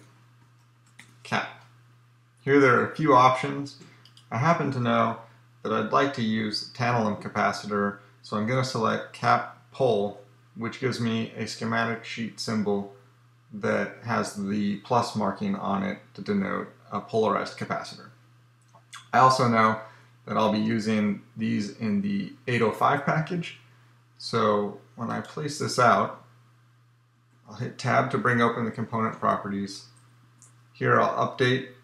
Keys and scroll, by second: 27.0 Tab.